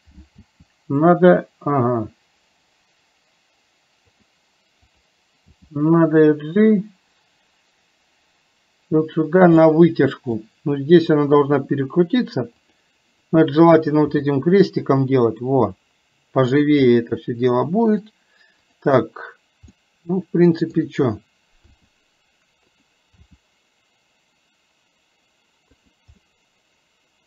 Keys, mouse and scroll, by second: 9.7 scroll up 1, 9.8 middle click, 10.3 scroll down 1, 13.2 click, 16.5 click, 17.0-18.2 middle drag, 20.0 middle click, 26.2-27.2 middle drag.